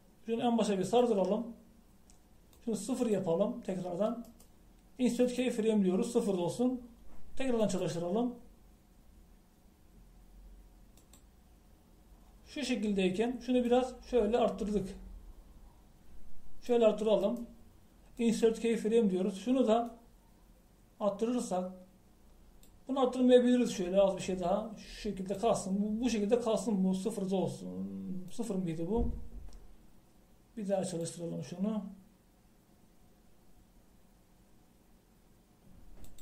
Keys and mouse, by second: 9.8 click, 12.1-16.6 drag, 18.3-20.1 middle drag, 33.1 click.